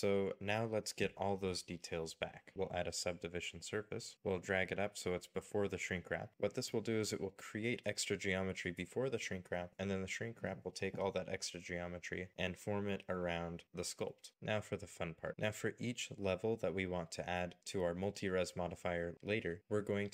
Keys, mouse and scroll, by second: 0.2 shift+middle click, 1.0 scroll down 1, 1.4 Tab, 2.1 shift+middle click, 8.6 shift+middle click, 9.7-11.0 scroll down 1, 17.7-18.2 scroll up 1, 18.4 shift+middle click.